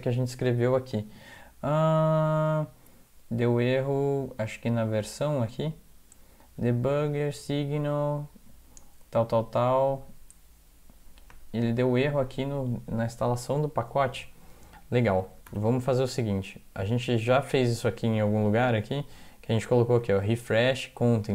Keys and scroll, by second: 15.5 alt+0.